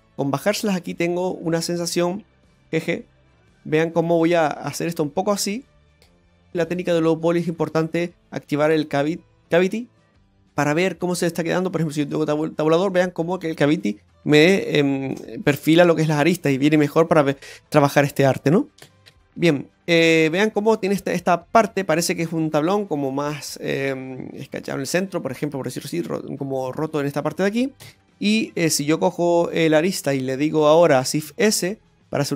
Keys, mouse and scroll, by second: 0.8 click, 1.6 right click, 2.8 g, 4.0 middle click, 5.1 g, 6.2 scroll down 3, 6.5 click, 12.0 Tab, 12.5 scroll down 1, 12.7 middle click, 16.7 scroll down 2, 16.9 middle click, 17.8 shift+middle click, 19.0 shift+middle click, 19.0 scroll up 2, 19.0 shift+g, 19.4 middle click, 20.4-21.0 scroll down 1, 21.0-21.6 scroll down 1, 22.4 middle click, 27.8 Tab, 29.5 click, 30.3 alt+shift+right click.